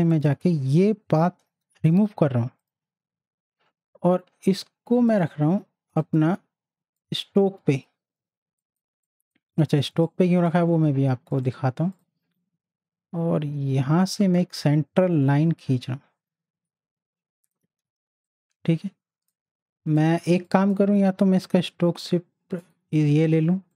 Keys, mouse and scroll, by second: 5.1 click, 5.1 click, 8.2 z, 8.6 click, 9.5 space, 9.6-11.3 drag, 11.3 right click, 11.9-17.8 drag, 17.8 z, 18.2-20.0 drag, 21.6 i, 22.6 click.